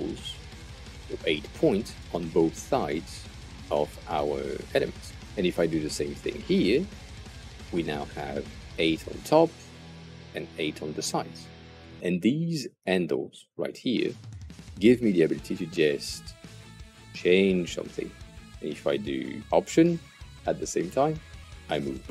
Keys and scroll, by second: 6.7 8, 7.1 Return.